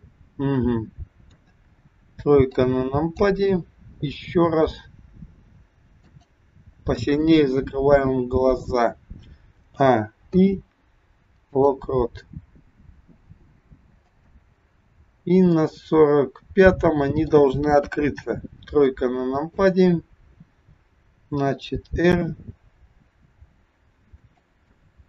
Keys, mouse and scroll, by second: 1.2 KP_3, 2.5 click, 4.6 r, 9.5 a, 10.3 i, 14.0 click, 15.5 middle click, 17.8 KP_3, 18.8 click, 20.3 scroll down 1, 21.4 r, 24.8 middle click.